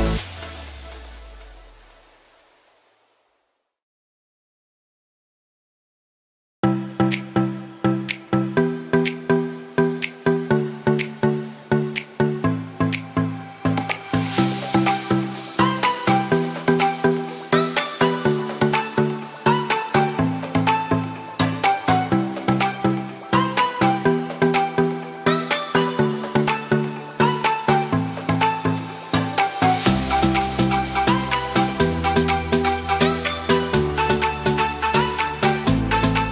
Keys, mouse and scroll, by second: 35.7-36.3 right drag.